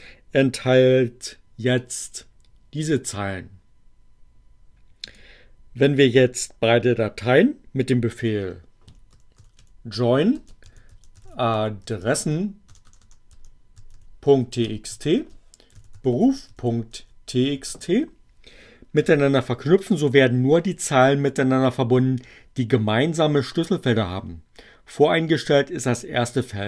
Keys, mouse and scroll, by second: 1.7-3.0 drag, 5.0 click, 8.7-17.5 typing, 19.0 Return.